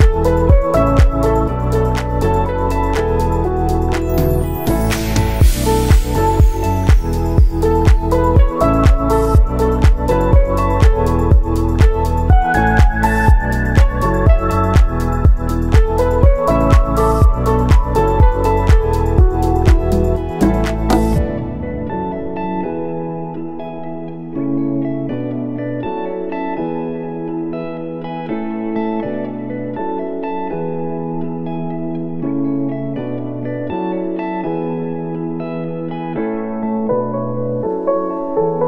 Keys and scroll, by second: 16.8-17.7 typing, 18.5 ctrl+s, 20.9 F9, 21.7 ctrl+s, 26.7 space, 37.1 p.